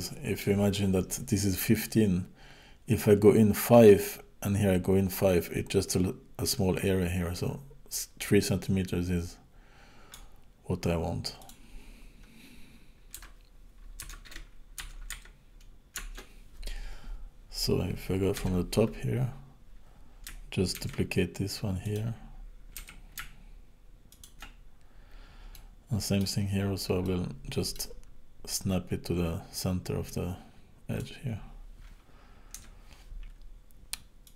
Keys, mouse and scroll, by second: 7.1-8.6 scroll up 2, 8.6 click, 11.4 click, 18.4 KP_7, 19.0-19.4 scroll down 2, 19.4 scroll up 2, 20.8 shift+d, 22.8 r, 24.6-25.5 scroll up 2, 25.5 middle click, 26.4-27.1 scroll down 3, 27.1 middle click, 27.1-27.8 scroll down 2, 28.1-28.6 scroll up 3, 30.1 click, 32.6 KP_7, 34.2 click.